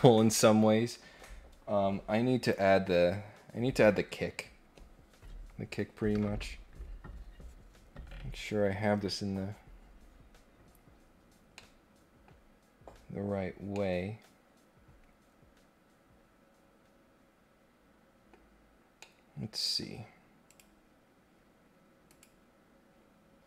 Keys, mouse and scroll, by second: 11.5 middle click, 13.7-18.2 middle drag, 18.9 middle click, 20.4 click, 22.0 click.